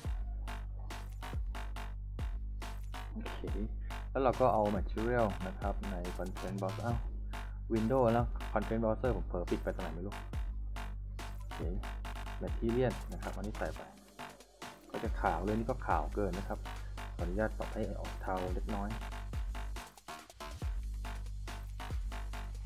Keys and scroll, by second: 14.0 s, 14.8 a.